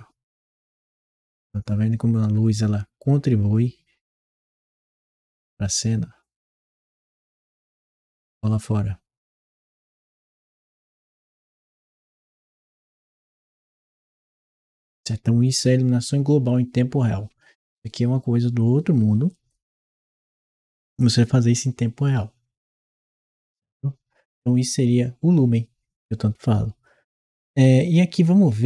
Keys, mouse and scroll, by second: 27.6-28.6 ctrl+right drag.